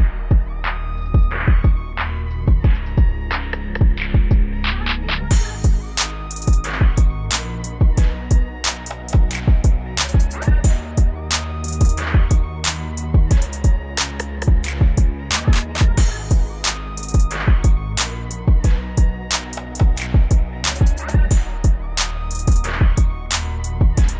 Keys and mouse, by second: 0.5 KP_2, 9.1 right click.